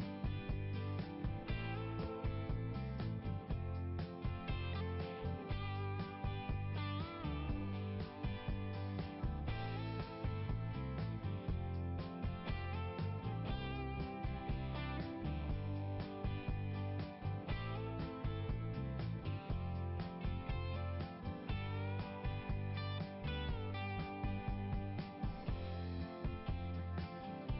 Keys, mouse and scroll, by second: 3.5 click, 5.3 click, 5.7 click, 6.0 click, 7.3 click, 9.7 click, 11.0 click, 13.5 click, 21.8 click, 22.7 click, 26.1 click.